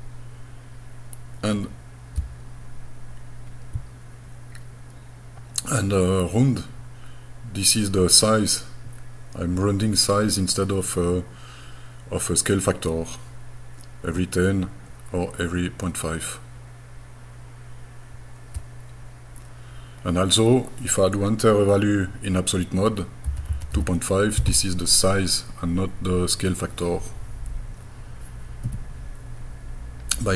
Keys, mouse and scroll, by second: 23.3 KP_2, 23.5 KP_Decimal, 23.8 KP_5, 28.6 Escape.